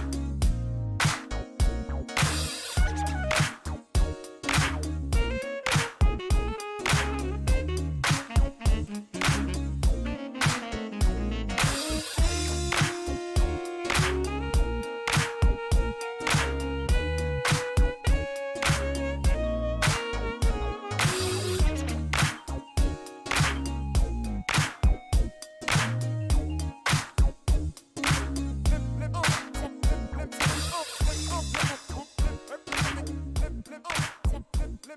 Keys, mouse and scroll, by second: 5.1 click, 6.7 middle click, 7.2 shift+right click, 7.9 shift+middle click, 8.6 middle click, 9.5 middle click, 10.1 middle click, 12.1 click, 12.8 click, 15.9 shift+right click, 16.7 shift+middle click, 17.4 middle click, 18.3 shift+right click, 19.7 click, 20.9 middle click, 21.3 shift+right click, 24.6 shift+middle click, 25.0 shift+right click, 26.4-27.1 shift+scroll down 4, 27.8 middle click, 28.4 shift+right click, 30.8 shift+middle click, 31.1 scroll down 1, 31.8 middle click, 33.4 shift+middle click, 33.9 scroll up 1, 34.7 shift+right click.